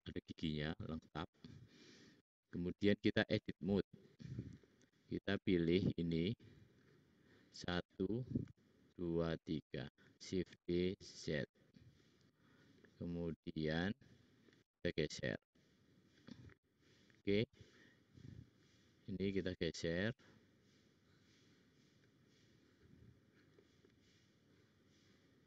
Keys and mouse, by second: 0.9 click, 3.4-5.1 drag, 3.4-5.1 middle drag, 3.4-5.1 right drag, 6.4-7.6 drag, 8.4-9.7 shift+drag, 10.0 shift+click, 10.6 shift+d, 15.0-16.2 drag, 18.5 click, 19.3 click, 19.3 middle click, 19.3 right click, 23.5-24.6 drag.